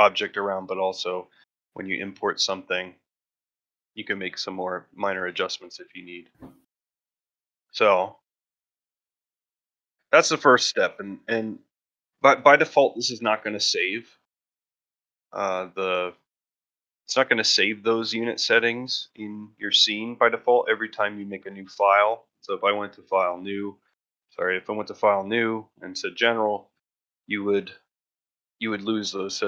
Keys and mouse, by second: 5.6-5.9 ctrl+middle drag, 6.0 shift+middle drag, 6.6 middle drag, 7.0 ctrl+middle drag, 7.2 shift+middle drag, 7.6 middle drag, 8.1 shift+middle click, 9.9-16.9 drag, 16.9-17.2 middle drag, 20.1 middle drag, 20.7 ctrl+middle drag, 21.1 shift+middle drag, 22.3 click.